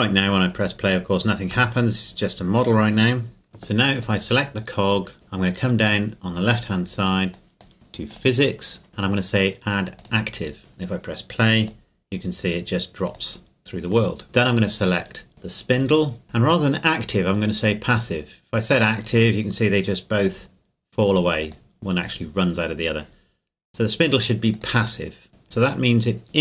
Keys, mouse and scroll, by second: 0.6 click, 3.5 middle click, 4.0 right click, 7.3 click, 8.1 click, 10.0 click, 11.6 click, 15.0 right click, 19.0 click, 24.5 click.